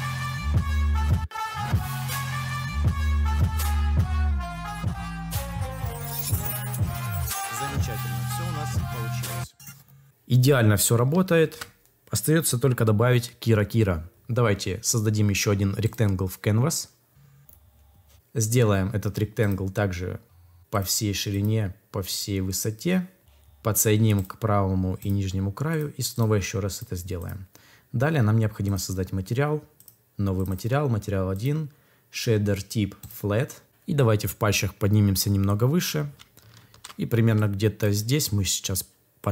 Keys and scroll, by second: 11.3 ctrl+s, 36.5 ctrl+s.